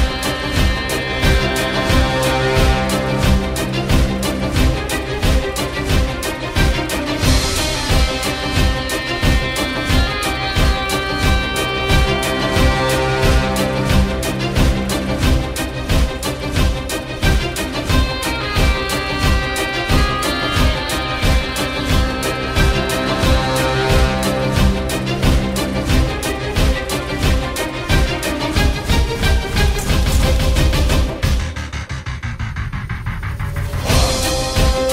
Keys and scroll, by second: 2.2 ctrl+a, 3.2 i, 5.7 ctrl+z, 8.0 F4, 8.9 Delete, 9.4 Delete, 9.9 F4, 11.1 F4, 11.5 ctrl+a, 11.6 ctrl+g, 12.8-14.3 typing, 16.5 F4, 16.5 8, 16.6 Return, 16.9 Delete, 18.5-19.8 typing, 21.4 ctrl+u, 23.4-23.8 typing, 24.3 Delete, 29.1 F4.